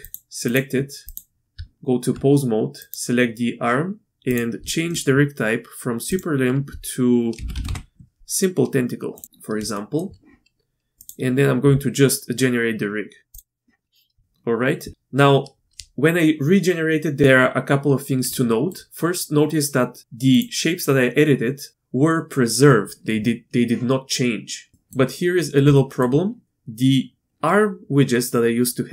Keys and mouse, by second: 1.0 click, 1.5 Tab, 2.8 click, 6.2-9.2 drag, 9.7 shift+middle drag, 13.3 click, 18.5 shift+drag, 24.7 shift+middle drag, 25.8 shift+middle drag.